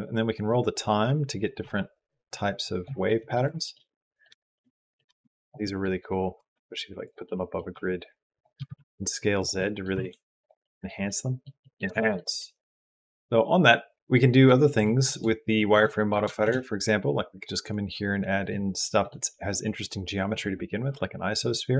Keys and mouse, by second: 0.3-1.8 drag, 2.2 click, 2.4 click, 3.0 middle click, 3.4-4.8 shift+middle drag, 5.0 g, 5.5 click, 6.2 g, 7.2 click, 7.6 s, 8.4 s, 9.6 click, 9.8 g, 10.5 click, 10.9 click, 11.8 shift+click, 13.0 click, 13.0 g, 13.6 middle click, 14.6 click, 14.7 middle click, 14.8 click, 15.4 shift+click, 15.7 click, 16.2 shift+a, 18.7 click, 21.3-21.7 drag.